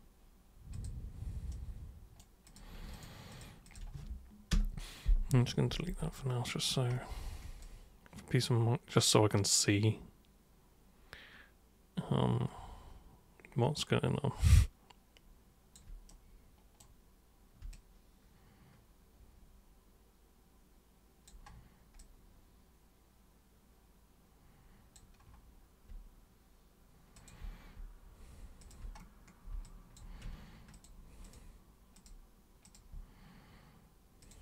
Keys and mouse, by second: 0.8 super+click, 1.5 super+right click, 2.5 super+click, 2.9 ctrl+shift+super+click, 3.3 ctrl+shift+super+click, 3.7 ctrl+shift+super+click, 6.2 alt+super+click, 7.6-15.7 alt+super+drag, 16.1 alt+right click, 17.7-21.3 drag, 22.0-25.0 alt+super+drag, 27.2 super+click, 28.6 super+click, 29.6 alt+super+click, 30.7 ctrl+shift+super+click, 31.3 ctrl+shift+super+click, 32.0 ctrl+shift+super+click, 32.6 ctrl+shift+super+click, 34.3 ctrl+shift+super+click.